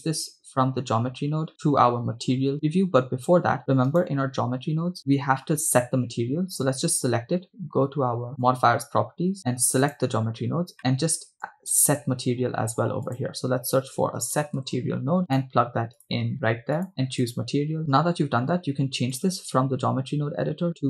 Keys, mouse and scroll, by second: 4.1 right click, 8.3 click, 9.9 click, 10.8 middle drag, 11.5 click, 12.2 shift+a, 16.8 click, 19.1-20.8 drag.